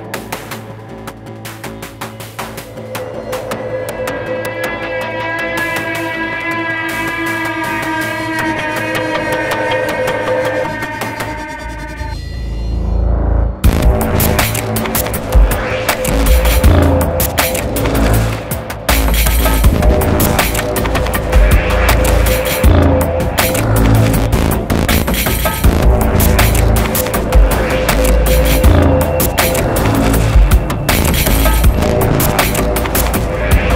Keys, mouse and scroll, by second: 7.6 double click, 22.7 alt+click, 24.5 double click, 25.4 ctrl+z, 28.1 ctrl+z, 28.6 ctrl+z, 29.3 alt+click, 30.0 double click, 31.7 ctrl+z, 31.9 ctrl+z.